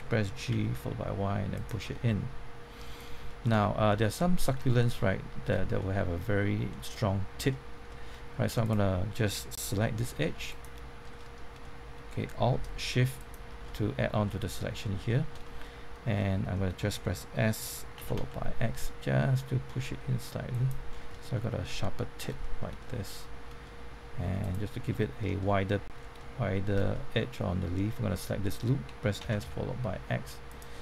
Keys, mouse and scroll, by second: 0.5 y, 1.5 click, 1.8 middle click, 3.7 shift+middle click, 4.4 scroll up 1, 4.6-7.5 shift+middle drag, 8.6 click, 11.1 middle click, 13.1 alt+shift+click, 14.2 middle click, 17.7-18.6 typing, 20.5 click, 20.9 scroll down 1, 21.1 middle click, 22.8 shift+middle click, 24.4 alt+click, 24.9 middle click, 25.9 scroll down 1, 26.1-28.7 middle drag, 28.9-29.9 typing, 30.4 click, 30.7 middle click.